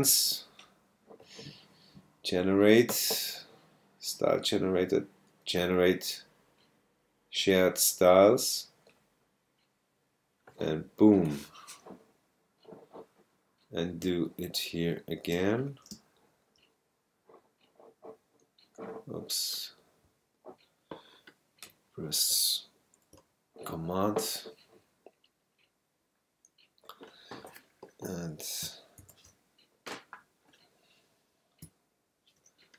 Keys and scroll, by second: 14.0 space, 16.2 super+space, 16.9 space, 29.0 ctrl+super+g.